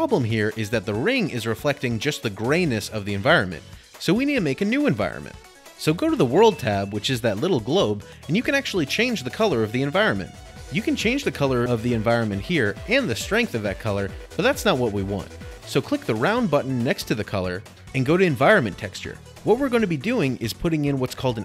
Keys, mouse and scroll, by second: 0.4 middle click, 5.5 click, 7.1 click, 9.4 click, 11.2 click, 11.6 click, 13.8 click, 14.1 click, 14.4 1, 14.7 Return, 16.7 click, 18.4 click.